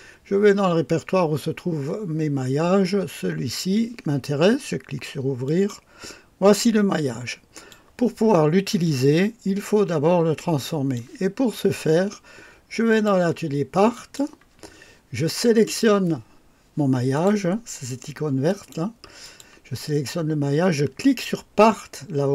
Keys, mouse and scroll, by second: 5.5 click, 6.5-7.9 drag, 8.9-11.2 drag, 12.9 click, 14.0 click, 15.7 click, 17.2 click, 18.5 click, 19.3 click.